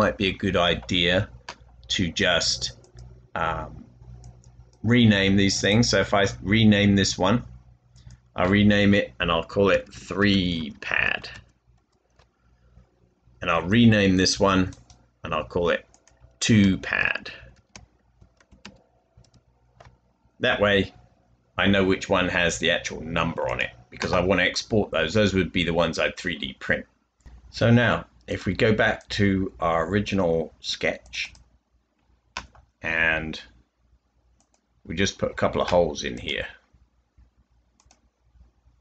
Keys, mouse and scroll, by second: 9.5-12.2 typing, 16.9-19.2 typing, 28.9 typing, 31.4-35.0 typing.